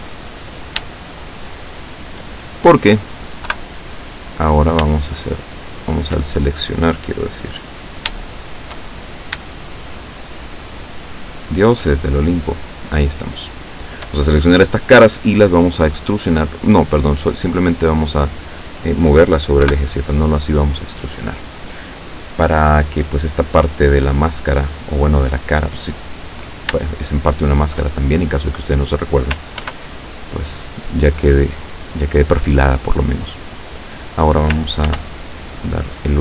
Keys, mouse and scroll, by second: 0.5 right click, 1.1 shift+right click, 1.7 shift+right click, 3.5 KP_7, 5.2 shift+right click, 8.4 shift+right click, 8.9-9.6 shift+middle drag, 10.0 shift+right click, 11.0 shift+right click, 11.9 shift+right click, 13.0 shift+right click, 13.8 shift+right click, 15.0 middle click, 16.4-18.7 drag, 19.7 KP_7, 26.9-28.1 shift+middle drag, 29.7 ctrl+r, 30.6 click, 32.1 click, 34.9 ctrl+r.